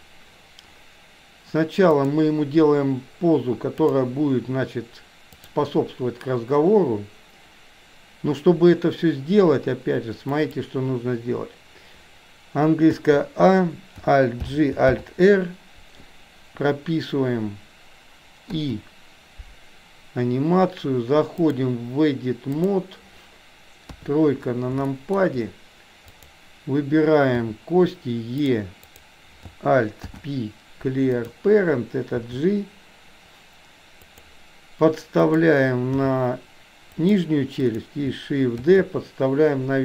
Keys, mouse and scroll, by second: 2.0 click, 3.9-5.5 drag, 10.3 click, 13.0 a, 14.5 alt+g, 15.0 alt+r, 18.6 i, 21.5-22.8 drag, 23.9 KP_3, 24.9 shift+middle click, 26.1 click, 27.5 e, 28.9 click, 30.1 alt+p, 32.3 g, 36.0 g, 37.6 click, 38.6 shift+d.